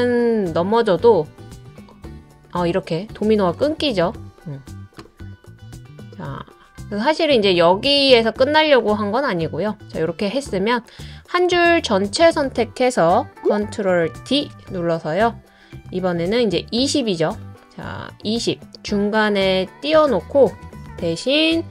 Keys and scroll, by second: 13.4 ctrl+d, 14.2 super+d.